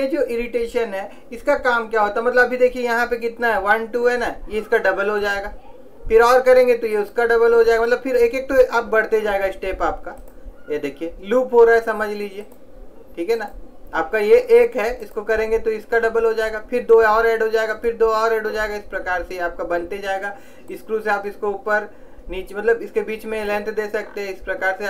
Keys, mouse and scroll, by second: 5.4-8.9 drag.